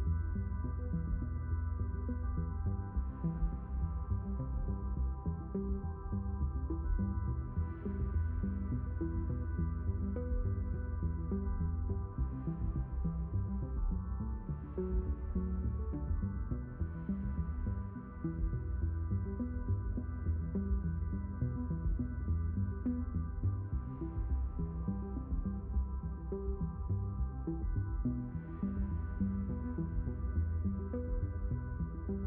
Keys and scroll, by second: 3.5 s, 8.5 q, 16.0 0, 18.0 5.